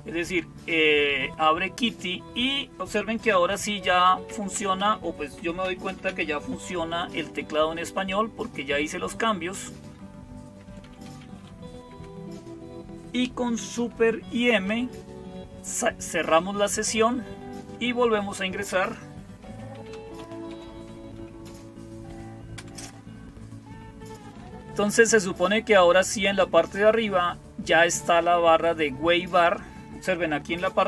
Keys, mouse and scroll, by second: 0.0-30.8 typing.